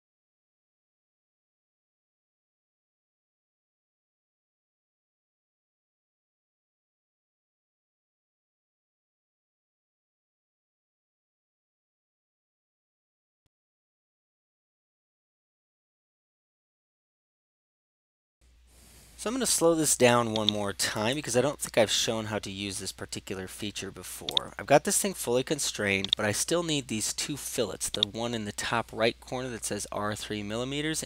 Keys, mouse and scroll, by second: 0.1-0.5 typing, 0.7 Return, 1.0 right click, 1.2 click, 2.0 click, 2.3 click, 2.7 typing, 3.1 Delete, 3.1 Delete, 3.3 Return, 3.6 right click, 4.1 click, 5.3 click, 5.6 click, 5.9 typing, 6.2 Return, 7.9 click, 8.1 click, 9.1 typing, 9.5 Return, 9.7-10.1 scroll, 10.2 right click, 10.4 click, 11.8 click, 12.3 click, 13.3 Escape, 14.2 click, 16.1 Escape, 16.8 click, 17.2 click, 17.5 4, 18.0 click, 20.5-21.6 right drag, 24.5-25.6 drag, 26.2-27.3 drag, 28.1 click.